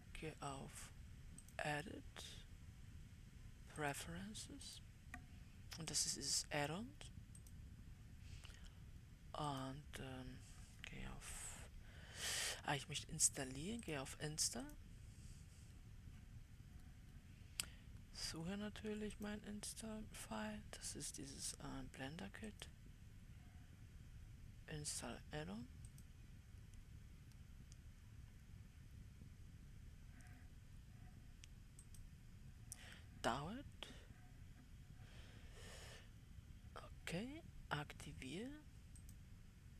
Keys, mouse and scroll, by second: 2.1-39.7 drag.